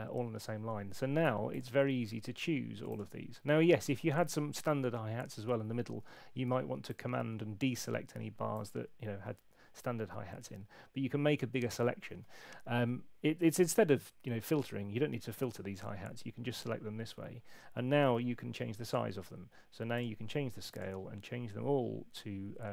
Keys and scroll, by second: 18.1 super+8.